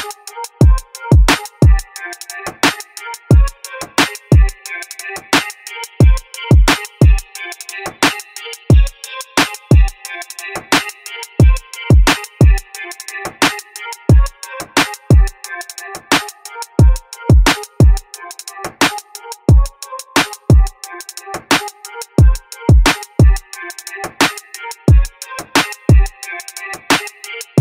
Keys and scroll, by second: 0.0-0.1 typing, 13.0-14.0 typing, 21.9-22.9 typing, 23.0 Return, 26.2-27.2 typing.